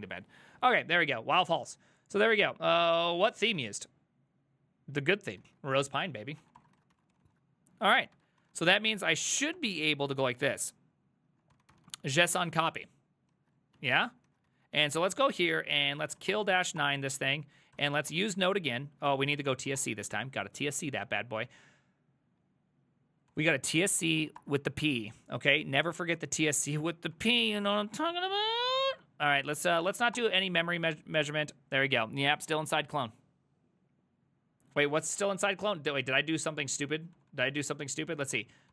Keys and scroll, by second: 5.5 alt+{, 6.2-8.6 typing, 8.0 ctrl+a, 8.5 ctrl+a, 9.6 Up, 10.4 Left, 11.3-12.6 typing, 13.4 ctrl+a, 13.8 2, 14.3 ctrl+a, 14.5 3, 14.7 ctrl+a, 14.8 ctrl+c, 14.9 ctrl+c, 15.7-20.2 typing, 16.8 Return, 19.1 ctrl+c, 23.1-24.0 typing, 24.2 Down, 24.4 Return, 26.1 Up, 26.3 Up, 26.7 Up, 27.2 Up, 27.8 Up, 28.5-29.9 typing, 30.2 Return, 34.9 alt+{, 35.2 alt++, 35.2 ctrl+a, 35.4-38.7 typing.